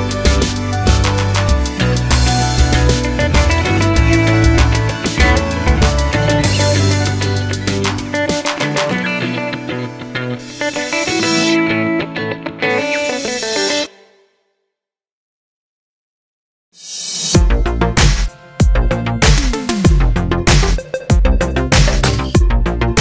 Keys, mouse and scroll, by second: 0.2 h, 0.5 click, 0.8 a, 1.7 shift+click, 2.7 ctrl+p, 3.0 click, 3.6 g, 4.3 click, 5.8 alt+p, 6.0 click, 6.6 r, 7.7 alt+h, 7.9 scroll down 1, 8.1 click, 9.5 click, 9.8-10.3 scroll up 1, 11.5 g, 14.6 click, 14.7 Tab, 15.1 e, 15.6 click, 15.8 scroll down 1, 16.0-16.5 scroll up 1, 16.5 ctrl+s, 17.2-19.7 drag, 20.6 click, 20.8 click, 21.3 click, 22.6-23.0 drag.